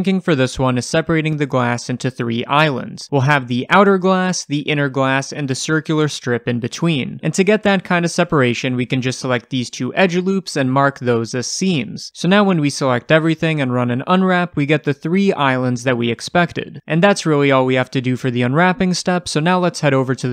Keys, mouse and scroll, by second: 7.2 2, 8.0-8.7 scroll up 2, 8.7 alt+click, 9.7 alt+shift+click, 11.4-18.3 right drag, 12.7 3, 13.1 a, 17.1 Tab, 18.2 alt+h, 18.3-20.3 middle drag, 18.9-19.4 scroll down 1.